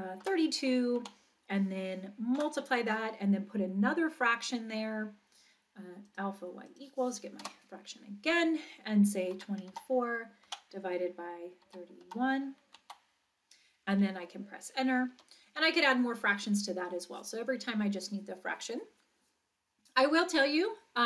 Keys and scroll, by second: 0.2 2, 1.0 Right, 7.4 Return, 9.3 2, 9.7 4, 10.5 Down, 11.7 3, 12.0 1, 12.8 Right, 15.1 Return.